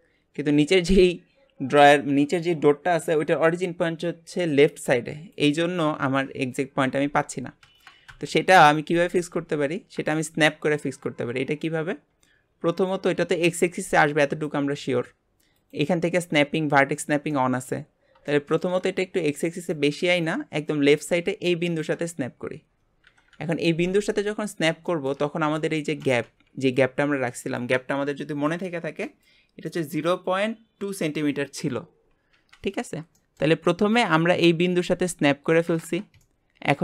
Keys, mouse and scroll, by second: 8.1 KP_1, 9.0 scroll up 4, 10.1-10.8 shift+middle drag, 10.8-12.0 scroll up 1, 12.0 scroll down 4, 12.9 click, 15.5-17.3 drag, 17.3 middle click, 17.9-18.2 scroll up 1, 18.2 shift+middle click, 19.1 click, 20.2 click, 22.2 scroll up 2, 23.1 KP_1, 24.2 shift+middle click, 25.2 scroll up 4, 25.5-26.0 shift+middle drag, 26.0 scroll up 1, 32.8-33.1 scroll down 3, 33.1-36.8 shift+middle drag.